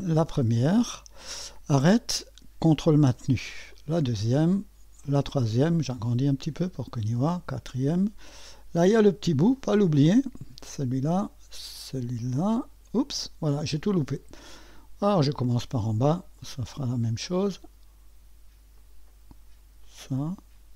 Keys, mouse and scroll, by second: 0.0 click, 3.7 click, 5.0 click, 5.7 scroll up 1, 7.3 click, 9.6-13.4 drag, 15.0 click, 16.4 click, 17.3 click, 18.8 click, 19.9 click.